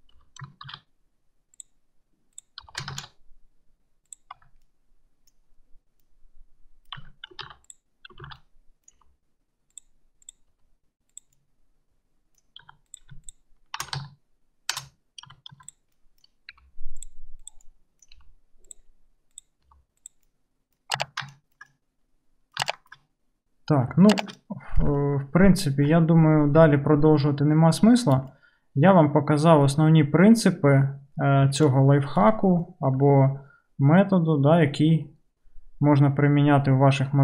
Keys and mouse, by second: 0.2 g, 2.4 click, 2.6-6.1 middle drag, 2.7 g, 4.5 Tab, 7.1 Tab, 7.5 alt+z, 7.7 click, 8.3 alt+z, 9.0 g, 10.3 click, 10.6 g, 12.7 2, 12.9 click, 13.1-17.5 shift+middle drag, 13.8 shift+2, 13.9 shift+e, 15.3 2, 15.5 1, 16.6 g, 17.5 click, 17.6-19.4 middle drag, 18.2 g, 19.4 click, 19.5-21.3 middle drag, 19.9 g, 21.1 Tab, 21.7-22.7 middle drag, 23.0-24.0 middle drag, 24.4-25.0 middle drag, 25.9-37.2 middle drag, 26.6 n, 28.1 KP_Decimal.